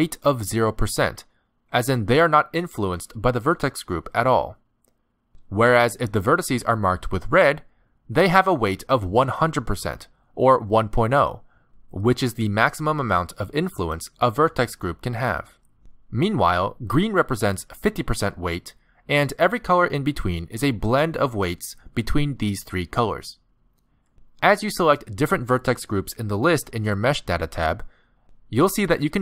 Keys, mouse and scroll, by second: 0.3 middle click, 1.6 middle click, 8.2 middle click, 17.4 middle click, 26.2 click, 27.5 click, 29.0 click.